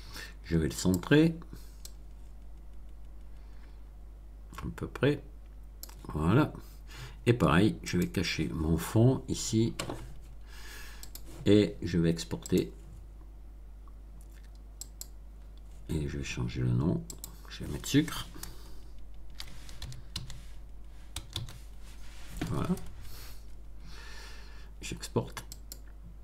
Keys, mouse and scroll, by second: 0.8 click, 1.8-6.0 drag, 7.8 click, 10.9 click, 12.4 click, 14.8 click, 17.1 click, 18.6-21.3 typing, 25.5 click.